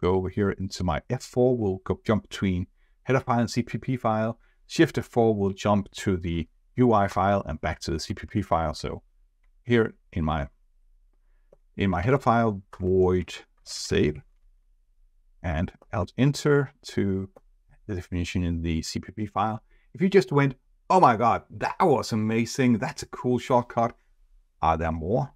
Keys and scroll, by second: 6.3 shift+F4, 8.8 F4, 15.8 alt+Return.